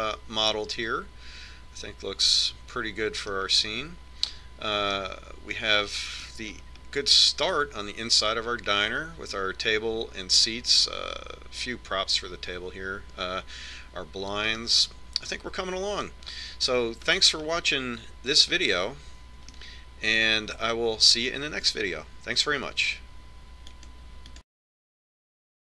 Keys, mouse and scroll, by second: 5.0-8.0 middle drag, 8.9-10.7 middle drag, 16.0-22.8 middle drag.